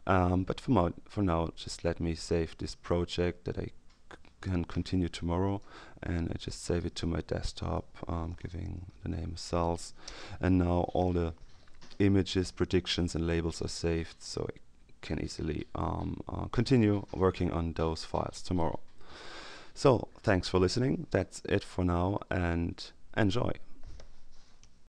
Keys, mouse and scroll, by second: 2.0 click, 5.4 click, 7.5 click, 8.0-9.3 typing, 10.0 Return, 18.4 click, 24.8 ctrl+alt+s.